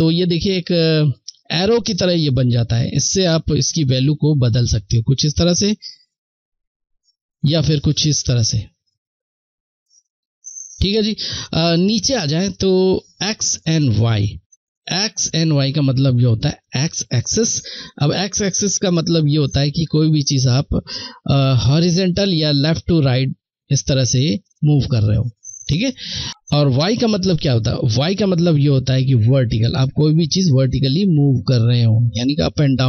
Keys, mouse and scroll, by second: 2.6 click, 18.2 click, 18.2 click, 19.1-25.4 drag, 28.3 click, 28.4 click.